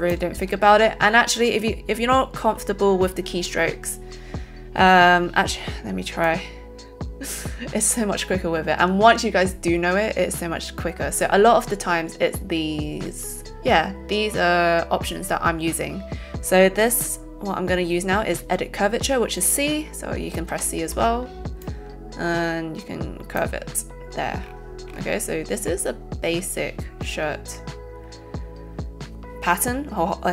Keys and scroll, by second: 20.6 c.